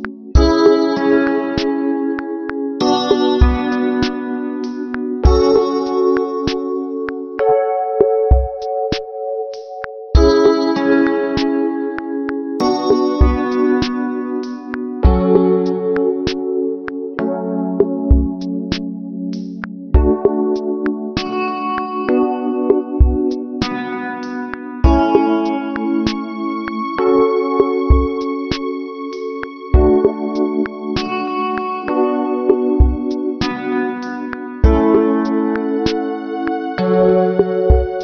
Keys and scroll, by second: 13.4 ctrl+-, 14.2 ctrl+=, 15.7 ctrl+alt+shift+n.